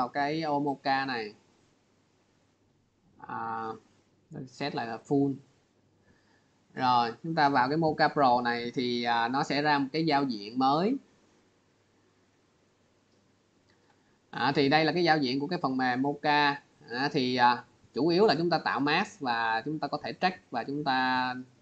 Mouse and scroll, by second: 3.4 click, 4.0 click, 4.7 click, 5.8 click, 13.1 click, 16.7-17.2 scroll.